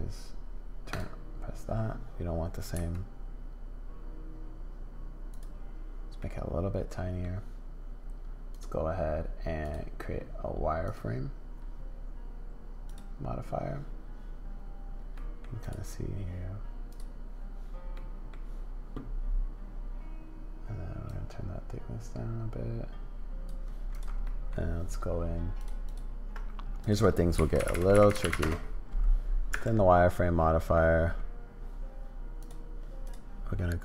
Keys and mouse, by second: 0.9 click, 2.7 s, 6.2-7.2 middle drag, 8.5 middle click, 9.6 middle click, 10.9-13.0 middle drag, 15.1 middle click, 17.9 middle click, 21.1-23.5 middle drag, 24.2 middle click, 25.9 middle click, 26.9-29.0 drag, 29.5 Tab, 30.1 middle click, 32.4 click, 33.5 middle click.